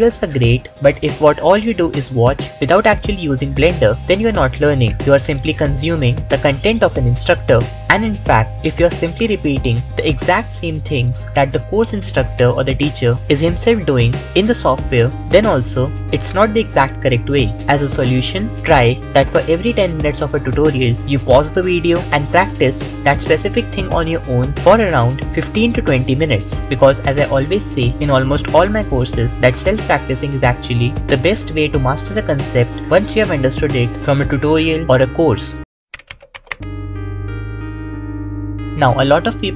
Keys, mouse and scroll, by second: 1.3 KP_7.